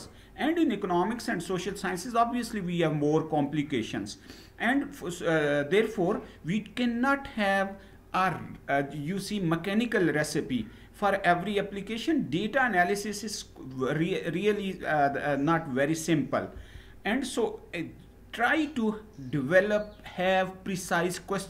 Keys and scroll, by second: 16.5 Down.